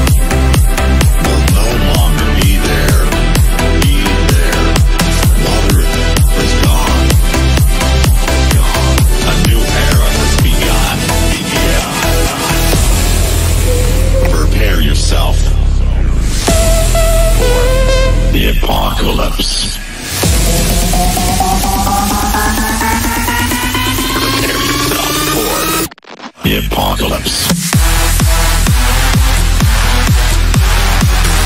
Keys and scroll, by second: 20.5 Escape, 23.2 F3.